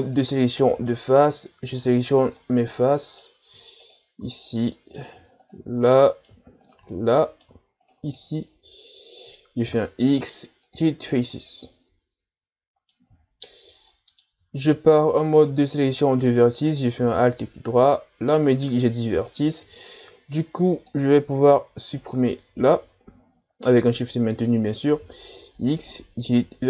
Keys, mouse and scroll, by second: 0.8 right click, 1.2 middle click, 2.1 shift+right click, 2.4-3.8 middle drag, 3.8 shift+right click, 4.3-5.4 middle drag, 5.4 shift+right click, 5.8 middle click, 6.7 shift+right click, 6.9 middle click, 7.8 shift+right click, 8.2-9.7 middle drag, 9.7 x, 11.3-14.6 middle drag, 14.6 ctrl+Tab, 16.6-19.6 alt+right drag, 20.1 ctrl+Tab, 21.2 right click, 22.0 shift+right click, 24.9 x.